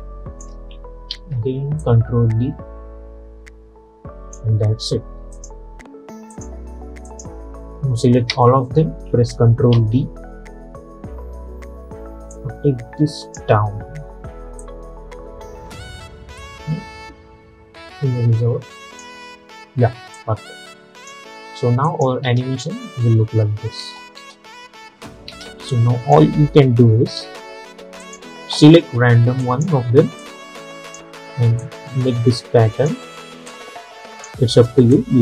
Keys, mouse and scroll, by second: 1.2 ctrl+d, 1.9-5.4 drag, 8.4 ctrl+a, 9.8 ctrl+d, 12.4-21.9 drag, 22.3 space, 25.8 click, 26.9 =, 27.3 =, 27.5 =, 28.1-35.2 drag.